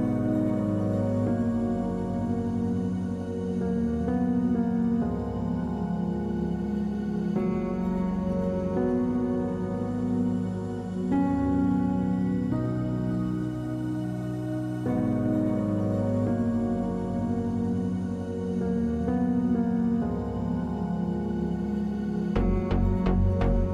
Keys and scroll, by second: 0.0-1.3 typing, 10.7 ctrl+space.